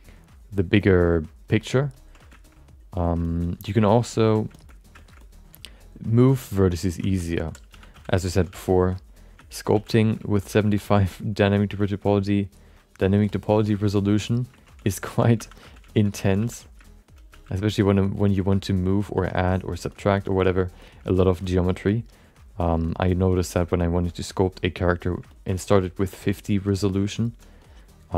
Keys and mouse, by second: 0.0 ctrl+click, 0.3 ctrl+click, 1.2 click, 1.4 ctrl+click, 1.9 ctrl+click, 2.4 alt+middle click, 3.2 shift+middle click, 3.4 middle click, 3.8 ctrl+click, 4.6 alt+middle click, 4.9 alt+shift+middle click, 5.2 alt+middle click, 5.7 ctrl+click, 5.9 ctrl+click, 6.3 ctrl+click, 6.7 ctrl+click, 7.2 shift+middle click, 7.3 middle click, 7.7 3, 7.9 f, 8.1 alt+shift+middle click, 8.5 f, 8.8 click, 9.1 click, 9.4 alt+shift+middle click, 9.8 f, 9.9 shift+middle click, 10.2 alt+middle click, 10.6 f, 10.7 click, 11.2 click, 11.8 alt+shift+middle click, 12.0 alt+middle click, 12.9 middle click, 13.2 alt+shift+middle click, 13.6 middle click, 14.0 middle click, 14.2 alt+middle click, 14.5 ctrl+middle click, 14.8 alt+shift+middle click, 15.4 2, 15.6 f, 16.0 middle click, 16.4 f, 16.9 shift+middle click, 17.5 click, 17.5 f, 17.9-19.1 drag, 19.1 click, 19.4 click, 19.9 alt+middle click, 20.1 alt+shift+middle click, 20.4 alt+middle click, 20.8 alt+shift+middle click, 21.0 middle click, 21.4 shift+middle click, 21.7 middle click, 22.1 click, 23.4 alt+shift+middle click, 23.7 alt+middle click, 24.0-25.2 drag, 25.3 alt+middle click, 25.5 alt+shift+middle click, 25.8 alt+middle click, 26.1 ctrl+middle click, 27.0 alt+middle click, 27.6 click.